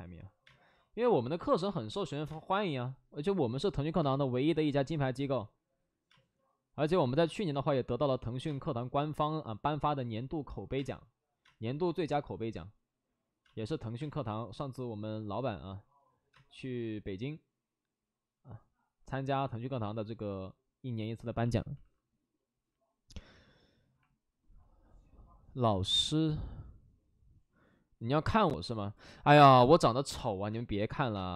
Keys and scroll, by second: 0.3 space, 1.6 alt+s, 2.2 space, 3.9 space, 6.0 space, 7.4 space, 8.4 space, 10.7 space, 11.3 space, 13.3 space, 13.9 space, 16.2 space, 21.7 alt+s, 30.5 space, 31.1 space.